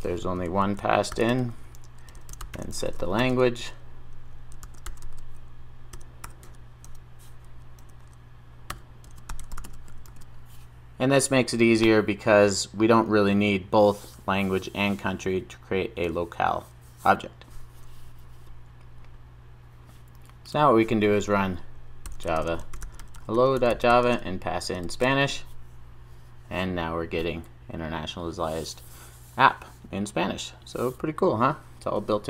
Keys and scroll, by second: 10.1 super+s.